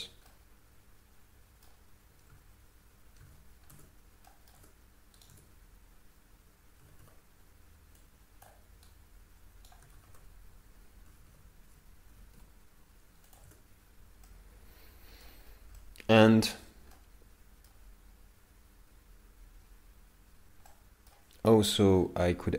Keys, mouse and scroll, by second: 0.0 Tab, 0.3 middle click, 2.3 alt+a, 3.3 alt+a, 3.7 Tab, 4.3 middle click, 4.6 Tab, 5.2 right click, 5.3 Tab, 8.0 click, 8.9 right click, 10.0 ctrl+z, 11.1 a, 12.1 g, 13.5 Tab, 14.3 middle click, 15.5-16.0 scroll up 4, 15.8 middle click, 20.7 middle click, 22.0 scroll up 2.